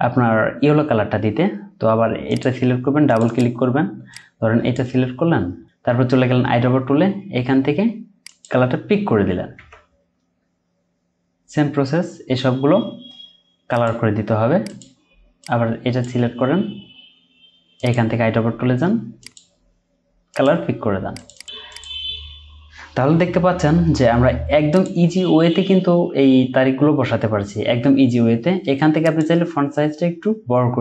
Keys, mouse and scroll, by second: 3.2 double click, 21.3 double click, 29.3 Up.